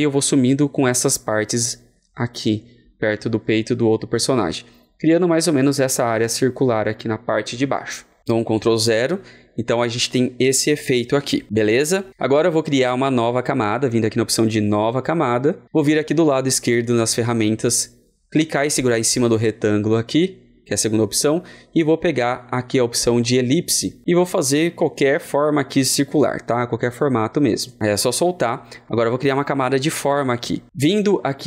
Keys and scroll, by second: 8.5 ctrl+0.